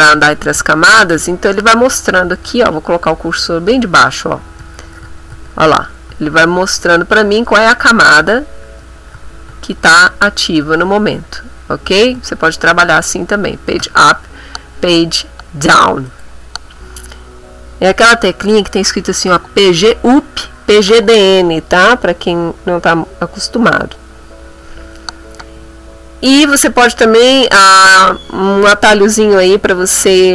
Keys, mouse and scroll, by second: 0.7 KP_6, 1.0 KP_9, 4.6 9, 5.0 3, 6.6 9, 7.4 9, 9.1 3, 9.5 KP_3, 10.6 KP_9, 12.2 KP_3, 12.4 KP_9, 12.7 KP_3, 12.9 KP_9, 13.8 Tab, 16.1 click.